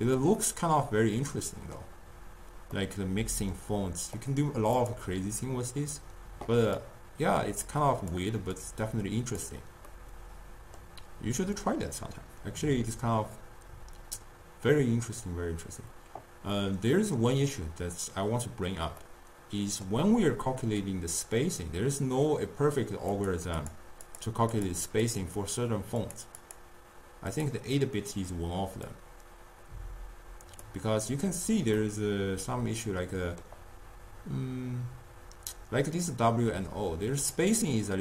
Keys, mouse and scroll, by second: 0.2 click, 0.4-4.3 middle drag, 4.3 drag, 5.0 click, 7.0-8.7 drag, 9.9-13.2 middle drag, 16.6-22.1 middle drag, 23.2 click, 23.6 click, 24.1 click, 24.6 click, 25.1 click, 26.2 click, 26.5 click, 27.4 click, 28.9-31.9 drag, 31.9-35.0 middle drag.